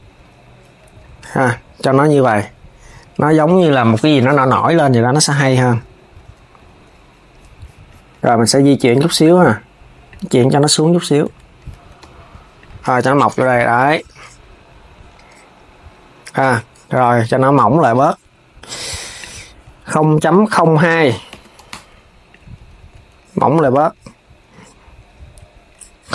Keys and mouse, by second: 0.6 click, 3.6 click, 5.7 Tab, 9.8 click, 11.0 Tab, 11.7 KP_3, 12.3 click, 13.3 s, 16.1 click, 18.9-20.0 drag, 20.0 Left, 20.5 Right, 20.6 Right, 22.0 click, 22.3 s, 23.2 KP_3.